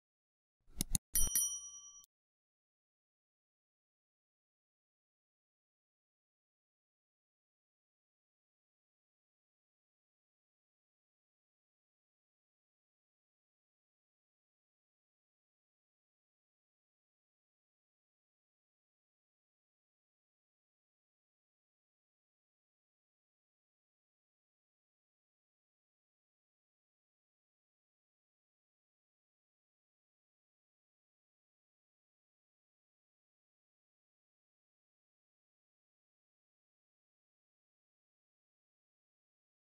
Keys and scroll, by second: 17.7 Return, 21.9 Escape, 25.0-26.4 typing, 28.9-29.6 typing, 34.0 Escape.